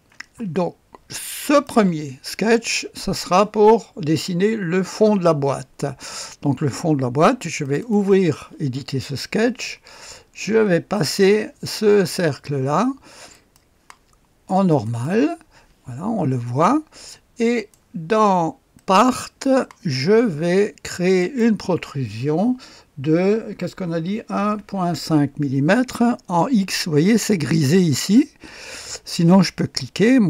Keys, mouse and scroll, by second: 1.4 click, 7.6 click, 10.9 click, 13.3 click, 14.8 right click, 15.0 click, 17.5 right click, 17.7 click, 18.7 right click, 19.0 click, 21.2 click, 24.0-24.7 typing, 29.7 click.